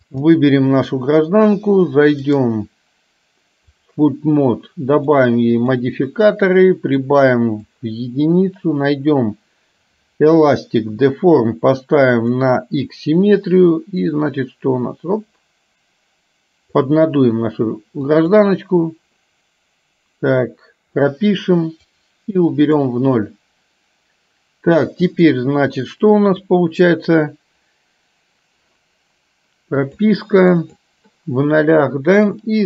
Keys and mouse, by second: 0.3 click, 2.5-4.0 drag, 5.7 click, 7.3 click, 12.3 click, 14.2-16.9 drag, 18.2 click, 21.9-22.9 drag, 25.2-28.8 drag, 32.4-32.6 drag.